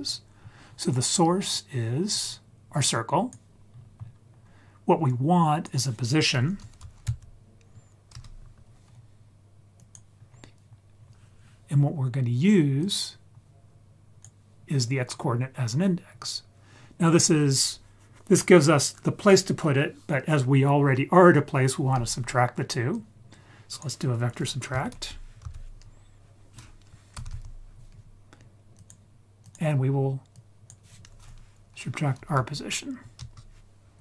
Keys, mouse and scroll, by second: 0.4-1.4 scroll down 1, 1.4-3.3 drag, 3.6-4.4 scroll up 7, 5.0-8.1 drag, 9.7 click, 10.2-10.7 scroll down 2, 10.7-12.8 scroll up 2, 12.8-14.2 drag, 12.8-13.4 scroll up 1, 15.1-16.9 scroll down 7, 16.9-19.1 scroll up 4, 22.9-28.8 drag, 29.4 click, 30.3-33.1 drag.